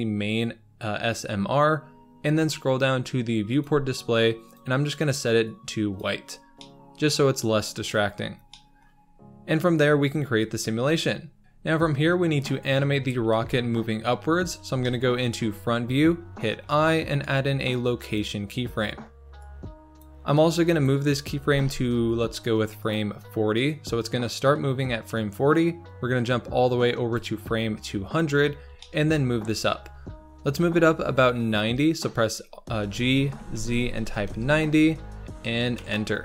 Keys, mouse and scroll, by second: 6.4 scroll down 3, 6.5-8.0 middle drag, 8.0-8.5 scroll up 3, 8.5-13.3 shift+middle drag, 13.3 KP_1, 14.3-14.8 scroll down 4, 14.8 shift+middle click, 15.5-16.6 scroll up 1, 16.6-18.2 scroll up 1, 19.4-20.8 drag, 21.3 g, 23.6-26.8 drag, 28.4-28.8 scroll down 2, 28.8 shift+middle click, 29.4-30.0 scroll down 2, 30.6 g.